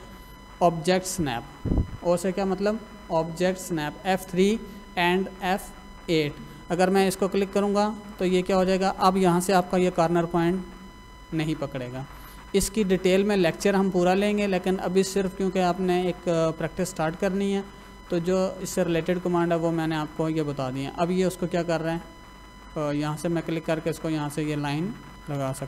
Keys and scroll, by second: 9.2 Escape, 9.6 l, 9.7 space, 25.1 Escape.